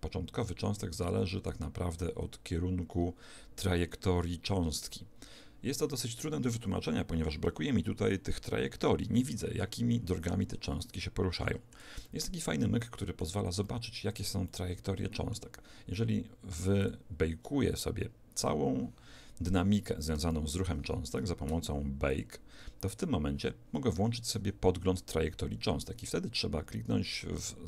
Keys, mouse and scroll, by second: 10.8-16.3 middle drag, 16.8 click, 19.6-22.1 middle drag, 22.1-23.6 drag, 27.4 click.